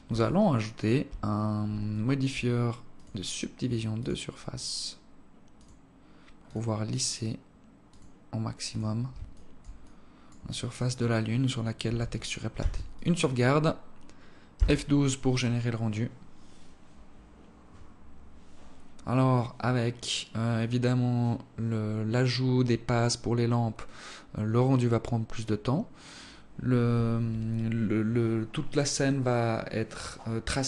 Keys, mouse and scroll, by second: 0.6 click, 1.6-2.1 scroll up 2, 2.2 alt+click, 3.3 click, 5.9 click, 9.6 click, 10.2 alt+click, 10.8 alt+click, 11.6 alt+click, 13.0 ctrl+s.